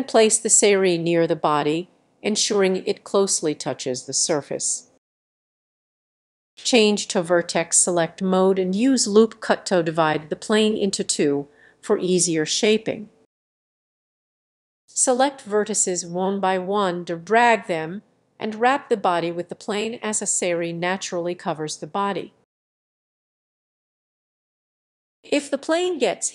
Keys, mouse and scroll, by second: 0.1 click, 0.9 middle click, 1.4 g, 2.9 click, 3.1 r, 4.2 click, 4.4 g, 5.8-10.0 drag, 10.8-16.0 drag, 16.0 g, 16.7 y, 17.0 click, 17.6 middle click, 18.5 shift+click, 18.9 g, 19.9 y, 20.3 click, 21.0 g, 21.5 click, 22.6 click, 23.1 g, 24.0 g, 24.3 click, 24.8-26.3 middle drag.